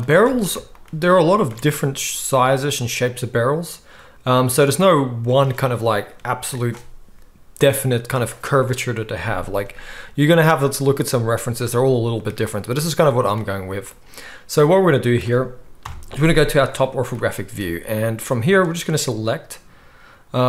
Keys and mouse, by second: 0.2 alt+a, 1.4 alt+shift+click, 1.8 s, 4.8-13.2 middle drag, 13.2 click, 13.3-18.7 middle drag, 15.8 KP_7, 16.7 z, 18.7-20.4 drag.